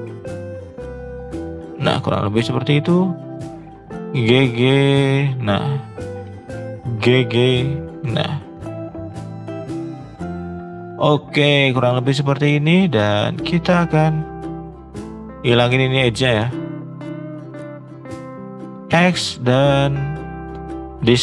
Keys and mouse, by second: 2.2 shift+middle click, 2.9 click, 3.9 g, 5.8 click, 6.2 g, 8.8 g, 9.6 g, 11.2 shift+middle click, 12.3 shift+middle click, 12.7 shift+middle click, 14.2 shift+middle click, 14.7 click, 15.5 shift+click, 16.1 ctrl+z, 16.5 shift+click, 16.6 shift+click, 16.9 middle click, 17.9 shift+click, 18.3 shift+middle click, 18.9 x.